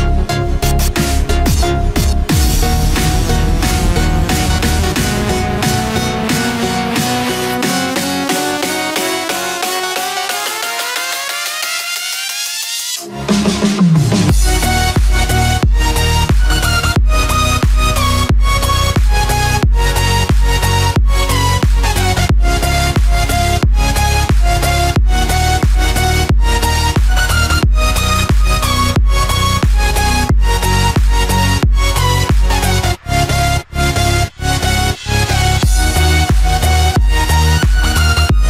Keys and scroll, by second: 12.0 ctrl+-, 14.4 ctrl+=, 27.1 ctrl+-, 28.6 ctrl+=.